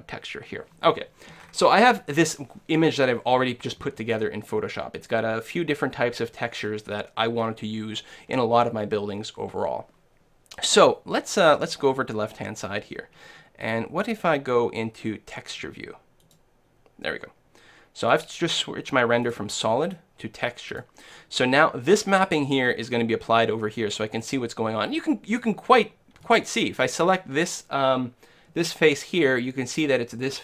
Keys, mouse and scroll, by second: 1.0-1.4 scroll down 1, 1.4-3.3 scroll up 1, 3.3 scroll up 1, 3.5 middle click, 4.2-5.8 scroll up 1, 5.8-6.1 scroll up 1, 6.1 middle click, 7.4-9.4 middle drag, 14.2-15.9 drag, 18.1-21.8 drag, 22.7 middle click, 23.2 middle click, 24.2-25.8 middle drag, 26.0 middle click, 26.3-30.4 right drag.